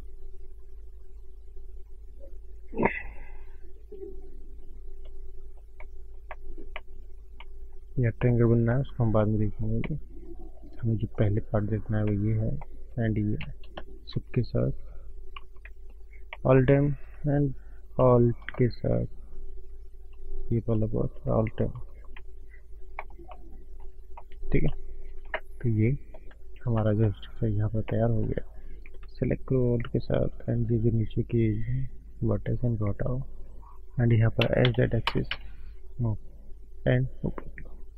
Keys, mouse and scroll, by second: 2.9 scroll up 2, 3.4-4.2 scroll down 2, 4.2-4.5 scroll down 2, 4.8-5.6 scroll up 2, 4.9 middle click, 5.6 scroll up 1, 5.7 middle click, 6.2 middle click, 6.6 middle click, 7.2 scroll down 1, 7.3 middle click, 8.2 middle click, 8.8 middle click, 9.6 middle click, 9.6 scroll up 1, 9.7 middle click, 10.7 scroll up 2, 11.2 scroll up 1, 12.0 middle click, 12.0 click, 13.9 shift+click, 15.3 alt+m, 16.2 middle click, 16.7 click, 16.8 click, 18.0 click, 18.6-19.0 scroll up 3, 19.0-19.7 scroll down 2, 20.3 shift+click, 21.7 alt+m, 22.3-22.9 scroll down 10, 22.9 click, 23.3 middle click, 23.9 scroll up 4, 24.2 middle click, 24.9 shift+middle click, 25.1 scroll down 1, 25.3 middle click, 26.7 middle click, 26.7 scroll up 1, 26.8 shift+middle click, 27.2 middle click, 27.5 scroll up 2, 28.1 middle click, 29.2 alt+click, 29.8 scroll down 4, 31.3 ctrl+shift+right click, 36.9 click.